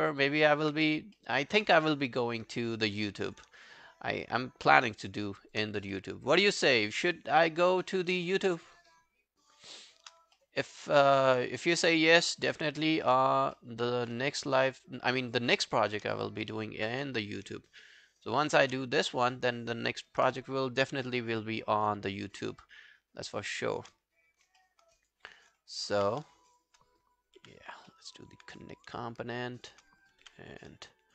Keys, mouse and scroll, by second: 0.1 alt+right click, 0.3 alt+click, 0.8 q, 1.2 alt+middle click, 1.4 alt+right click, 1.7 q, 1.8 right click, 3.6 shift+click, 4.5 shift+right click, 6.0 alt+middle click, 6.2 alt+right click, 6.4 alt+click, 6.7 alt+right click, 7.0 alt+click, 8.3 shift+click, 8.9 shift+right click, 10.4 alt+middle click, 10.7 alt+right click, 10.9 alt+click, 11.8 shift+click, 12.3 shift+right click, 13.6 alt+middle click, 14.7 shift+click, 15.1 shift+right click, 16.5 alt+middle click, 16.9 q, 18.5 shift+click, 19.1 alt+middle click, 19.2 alt+right click, 19.5 alt+click, 21.9 alt+l, 22.1 shift+right click, 24.6 alt+middle click, 25.0 alt+click, 26.0 q, 26.5 shift+click, 27.7 g, 27.9 alt+middle click, 28.2 alt+right click, 29.6 shift+click, 30.6 g, 30.7 alt+click.